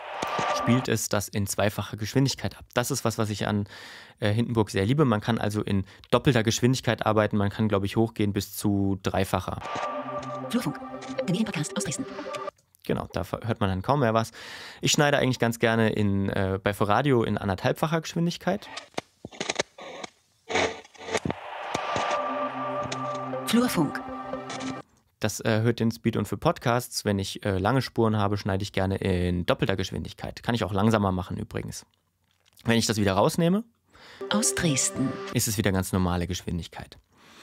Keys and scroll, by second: 0.2 space, 9.6 space, 12.5 space, 18.6 space, 24.8 space, 34.2 space.